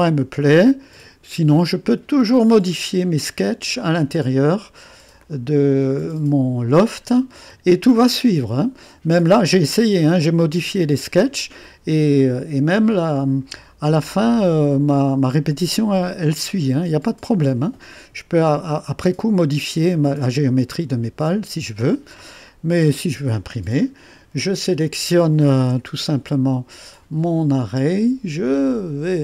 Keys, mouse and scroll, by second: 0.5 click, 1.7-2.8 drag, 3.8 click, 4.6 click, 5.3 click, 7.1 click, 10.3 click, 11.7 click, 16.4-19.7 drag, 20.0-22.5 drag, 25.4-26.1 typing, 27.5-29.2 drag.